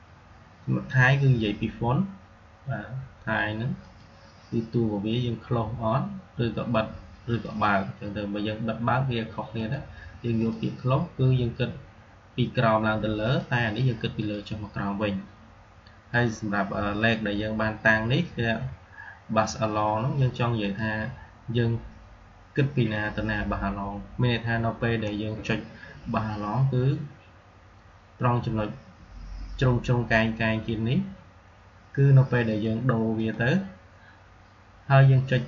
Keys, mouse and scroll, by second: 3.7 click, 7.1 click, 9.4 click, 13.1 click, 20.5 click, 32.4 click.